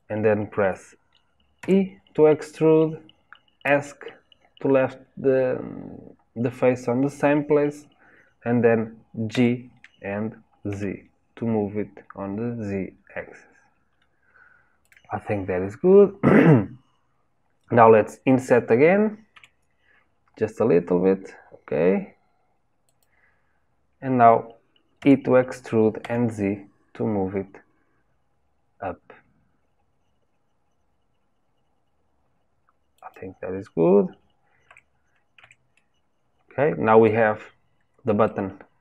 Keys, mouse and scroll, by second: 9.3 g, 15.7-16.3 scroll up 1, 16.3 scroll up 1, 17.1 scroll up 1, 25.4 e, 34.6 Tab, 35.3 Tab, 35.7-37.3 middle drag, 37.3-38.2 scroll down 2, 38.2-38.8 shift+middle drag.